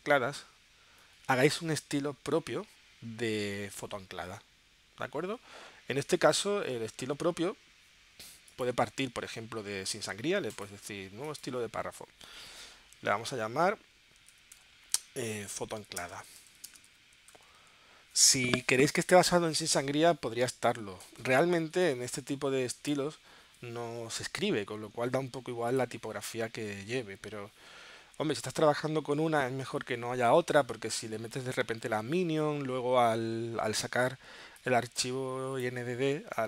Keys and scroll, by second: 14.3-18.0 typing.